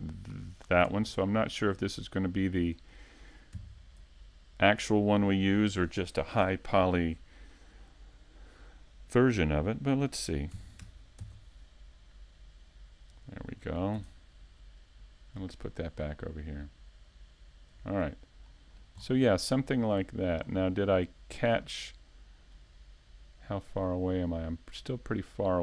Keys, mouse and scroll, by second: 0.0 a, 0.2 Tab, 0.2-1.0 scroll down 1, 1.1-1.5 scroll down 5, 1.5 middle click, 3.4 right click, 5.3 right click, 7.6-8.3 scroll down 6, 8.3 a, 9.1 middle click, 11.2-11.9 scroll down 2, 11.6 middle click, 12.7 shift+middle click, 13.3 shift+c, 13.9 shift+middle click, 17.6-18.4 scroll up 1, 19.5 middle click, 19.5 scroll up 6, 20.4 scroll up 1, 20.7 shift+middle click, 23.3-24.0 scroll up 2, 24.7 scroll down 4, 24.9 shift+middle click.